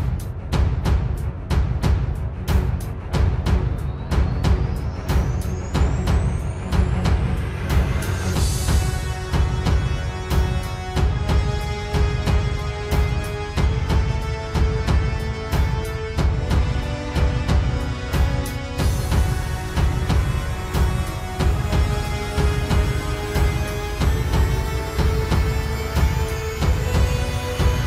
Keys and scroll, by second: 4.6 ctrl+z, 5.2 ctrl+space, 5.9 ctrl+space, 9.6 ctrl+z, 11.2 ctrl+z, 11.4 ctrl+z, 12.9 ctrl+space, 18.1 ctrl+space, 19.3 ctrl+z, 24.2 ctrl+space, 26.3 ctrl+space.